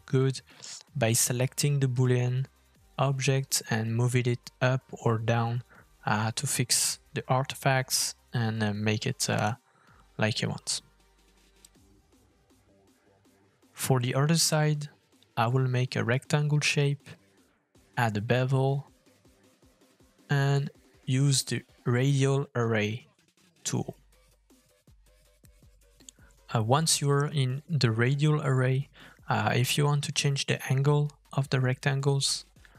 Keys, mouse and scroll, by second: 2.8 middle click, 3.6 middle click, 4.7 shift+middle click, 5.4 middle click, 5.4 scroll up 1, 5.8 click, 6.1 g, 7.1 middle click, 7.6 f, 9.7 middle click, 11.9 g, 16.2 middle click, 16.6 scroll up 2, 16.7 shift+middle click, 16.9 middle click, 17.0 shift+middle click, 17.0 scroll down 2, 17.4 shift+click, 17.9 click, 18.2 shift+middle click, 18.4 scroll up 1, 18.7 f, 20.6 shift+middle click, 25.9 middle click, 28.5 middle click, 28.7-29.0 scroll up 2, 29.0 shift+middle click, 31.3 middle click.